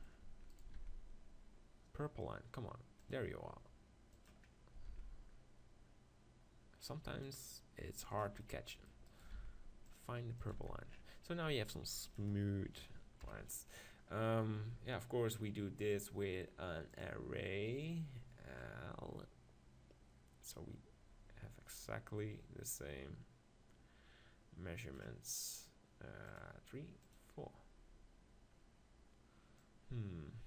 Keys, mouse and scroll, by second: 0.7 ctrl+r, 4.2-6.0 drag, 4.9 ctrl+r, 6.0-7.2 middle drag, 8.2-10.3 drag, 9.1-10.5 middle drag, 9.1 right click, 9.4 ctrl+r, 10.3 right click, 10.5 click, 10.6 Tab, 10.9-12.2 drag, 12.2-13.9 right drag, 13.2 KP_1, 13.9-16.1 middle drag, 16.1-21.2 drag, 26.4-29.0 drag, 29.6-30.4 drag.